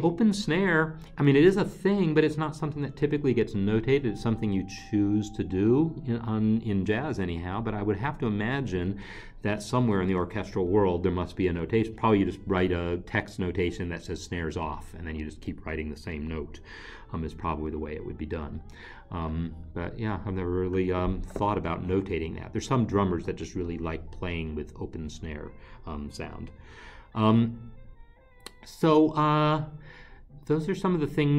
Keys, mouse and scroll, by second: 27.3 alt+Tab.